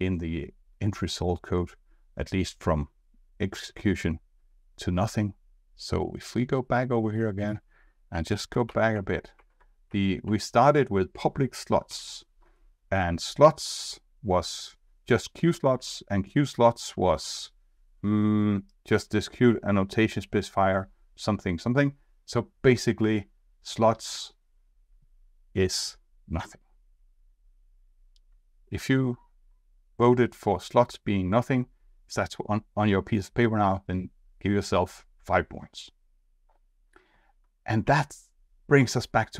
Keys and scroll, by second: 8.6 alt+Left, 9.3 alt+Left, 10.3 alt+Left, 11.9 alt+Right, 15.6 alt+Right, 16.6 alt+Right, 37.8 alt+Left.